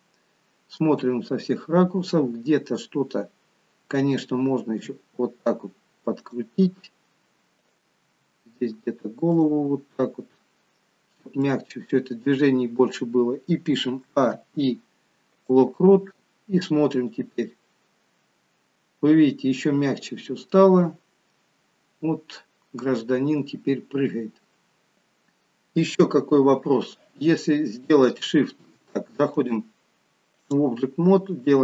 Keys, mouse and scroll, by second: 4.8 r, 7.6 click, 8.0 r, 10.0 middle click, 14.1 a, 17.5 click, 26.1 KP_3, 29.5 click.